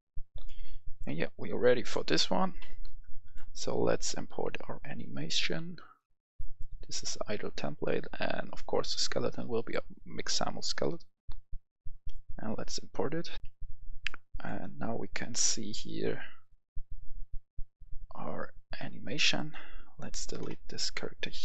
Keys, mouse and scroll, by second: 0.4-1.6 right drag, 1.8 click, 5.5-6.4 scroll down 1, 6.4-10.6 drag, 13.3 F11, 13.4 F10, 14.2 click, 20.4 Delete.